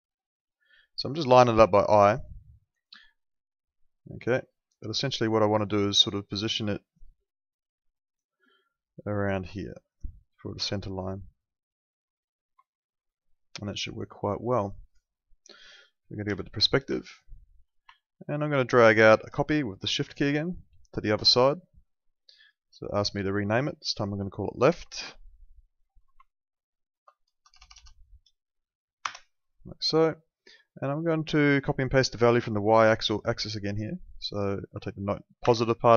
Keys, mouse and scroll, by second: 0.7 middle click, 2.7 ctrl+4, 2.9 ctrl+4, 4.3 ctrl+4, 4.7 ctrl+2, 12.4 Escape, 16.2 p, 16.9 alt+middle click, 19.5 shift+click, 22.2 click, 24.9 l, 26.1 Right, 27.4 BackSpace, 29.0 Return, 29.0 KP_Enter, 31.4 click, 35.4 ctrl+c.